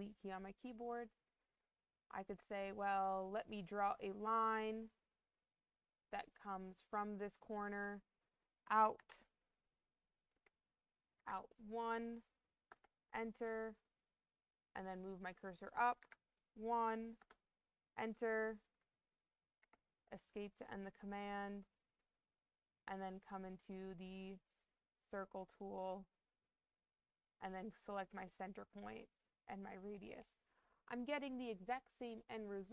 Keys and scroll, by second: 10.2 BackSpace, 11.1 1, 12.6 Return, 15.9 1, 17.1 Return, 19.5 Escape.